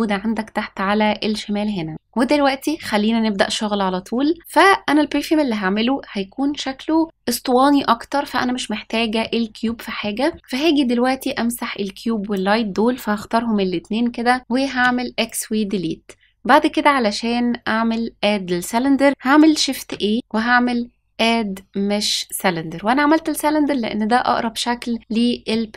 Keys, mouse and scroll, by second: 9.2 middle click, 9.9-10.3 shift+middle drag, 11.2-12.3 drag, 14.7 x, 19.7 shift+a, 25.4-25.7 middle drag.